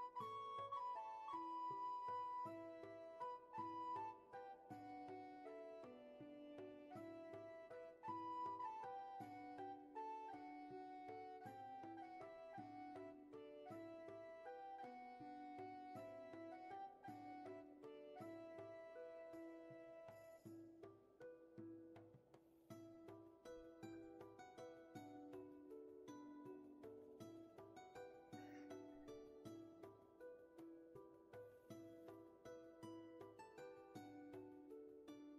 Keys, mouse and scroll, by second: 9.9 ctrl+z, 13.2 ctrl+z, 22.4 ctrl+z, 24.3 ctrl+z, 31.8 ctrl+z.